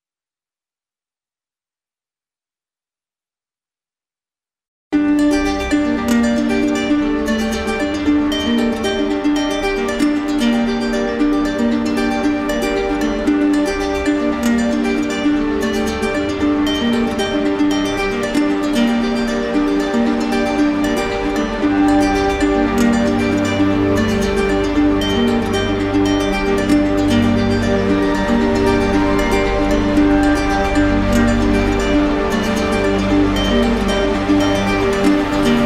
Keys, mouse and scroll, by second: 0.5 click, 1.3 click, 3.0 ctrl+d, 3.0 click, 4.4 ctrl+z, 6.3 alt+click, 8.2 alt+click, 8.8 alt+click, 10.2 click, 13.5 alt+click, 16.2 click, 17.8 click, 19.1-20.2 drag, 20.0 z, 21.4-22.5 drag, 22.9-23.9 drag, 31.5 click, 32.4 ctrl+d, 34.2 click, 34.8 ctrl+d.